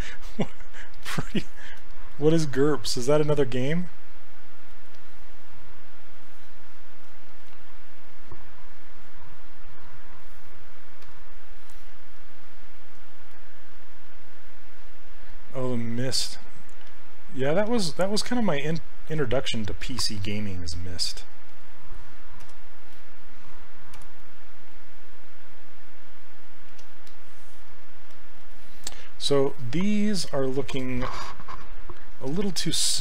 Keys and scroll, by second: 2.6 w, 11.9 s, 24.0 w.